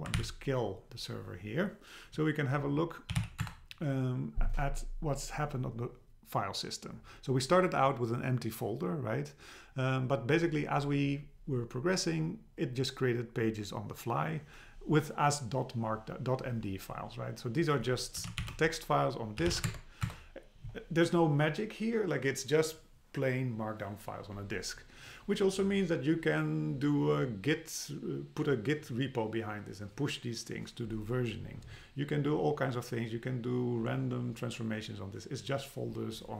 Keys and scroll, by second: 0.2 ctrl+c, 3.4 Return, 19.7 Tab, 20.1 Return.